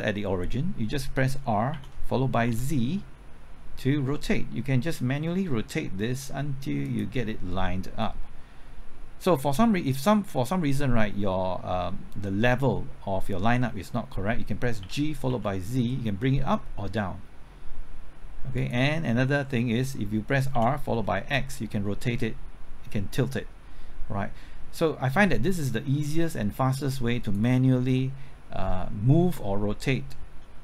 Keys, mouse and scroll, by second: 1.7 r, 2.4 z, 14.8 g, 15.3 z, 20.5 r, 20.9 x.